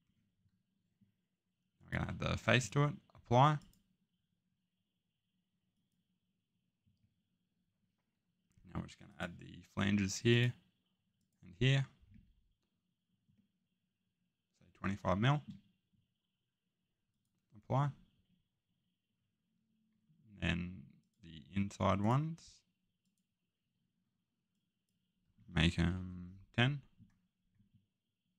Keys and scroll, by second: 25.4-25.9 typing.